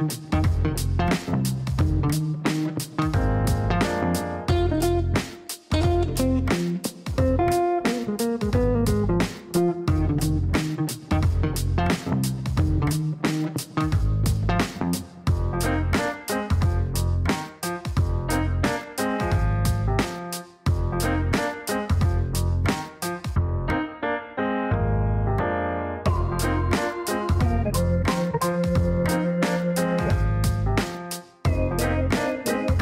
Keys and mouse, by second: 1.3 click, 4.2 click, 5.7-7.2 typing, 8.0 click, 9.5-11.0 typing, 13.5 click, 14.3 click, 16.4 click, 19.9 click, 20.6 click, 22.2 click, 23.7-25.9 typing, 26.8 click, 27.2 click, 28.0 click, 31.6 p, 32.2 i.